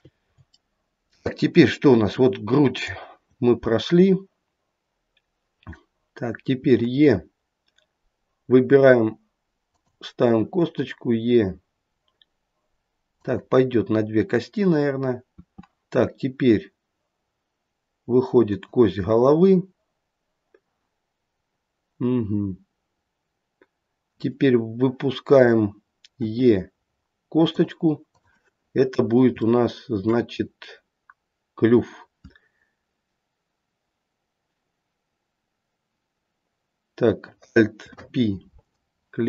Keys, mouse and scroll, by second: 2.7 click, 6.6 e, 10.4 e, 15.4 e, 21.5-24.5 scroll down 1, 26.2 e, 28.1 click, 28.8-29.2 scroll up 1, 29.5 shift+middle click, 37.7 alt+p.